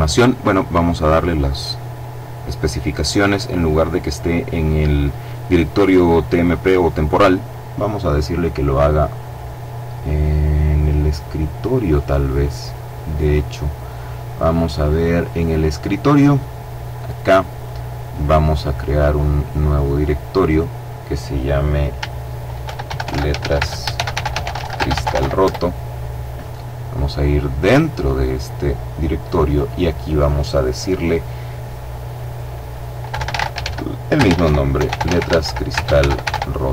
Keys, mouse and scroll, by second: 0.4 click, 1.1-2.1 scroll down 1, 6.4 click, 11.8 click, 14.6 click, 18.4 click, 19.7 click, 21.8-24.2 typing, 24.6 shift+Return, 26.8 click, 28.6 click, 32.3-35.5 typing.